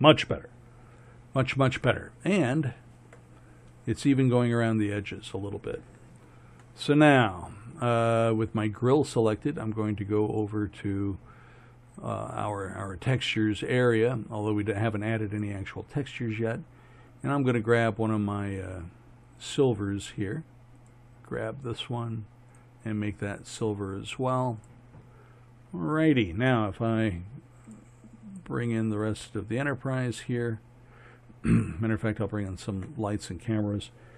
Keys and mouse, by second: 20.1-20.9 middle drag, 22.1-22.6 drag, 31.5-32.5 middle drag, 32.5-34.1 drag.